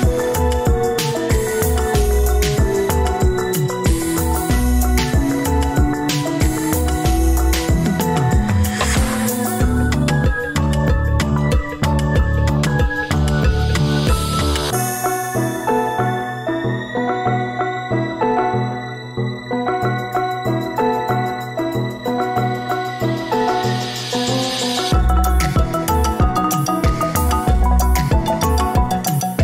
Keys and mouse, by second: 4.5-5.2 ctrl+drag, 6.2-6.7 middle drag, 7.7-8.8 middle drag, 9.4 ctrl+click, 11.4-11.9 ctrl+drag, 12.6 alt+z, 13.3 g, 17.3-19.4 middle drag, 22.9 click, 23.4-24.0 middle drag, 27.1 shift+click.